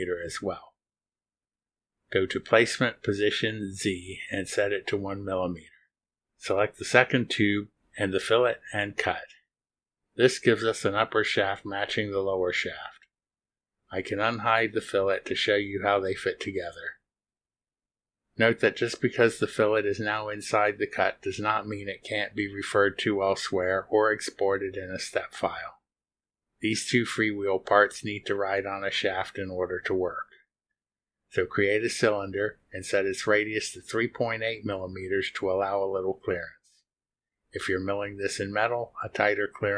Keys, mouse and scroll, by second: 0.0 click, 1.5 click, 1.8 scroll down 1, 3.0 click, 4.6 click, 5.9 click, 7.3 ctrl+click, 8.1 ctrl+click, 9.8 click, 13.5 click, 14.7 click, 15.4 space, 16.2 space, 17.5 space, 18.6 space, 30.3 click, 35.2-35.5 scroll down 1, 36.4 click, 37.2 scroll down 1.